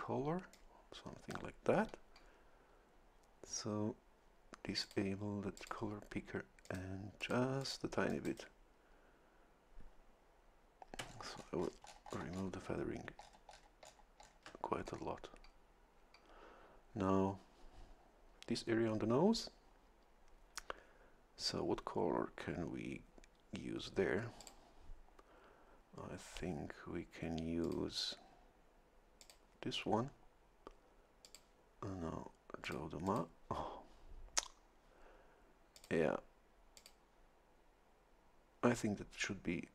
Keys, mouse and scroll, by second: 0.5-1.8 drag, 4.8 click, 5.6 click, 6.6 click, 7.2 click, 7.6 click, 8.1 click, 11.1-12.2 shift+scroll down 1, 12.2 shift+scroll up 1, 12.3-13.4 shift+scroll down 3, 12.6 shift+middle click, 13.8-14.6 shift+scroll down 3, 24.4 click, 27.6 click, 29.2 click, 31.2 click, 32.6 click, 33.0 click, 35.7 click, 36.7 click.